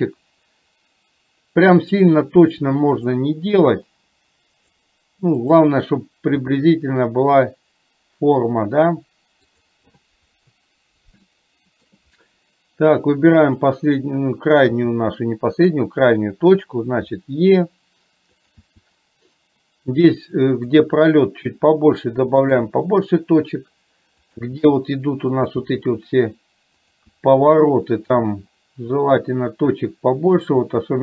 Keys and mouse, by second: 3.1 click, 5.6 click, 6.4 g, 11.4 shift+middle click, 13.4 click, 18.6 e, 27.2 e.